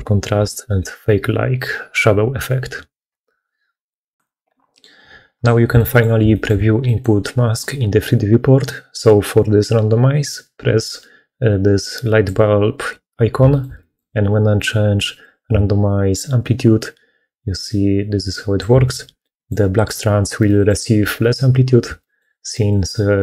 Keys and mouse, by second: 5.7 click, 6.2 shift+middle click, 6.7 middle click, 11.7 click, 13.4 shift+middle click, 13.7 middle click, 15.1-18.5 drag, 19.1 middle click, 20.3 middle click, 21.9 shift+middle click, 22.4 middle click.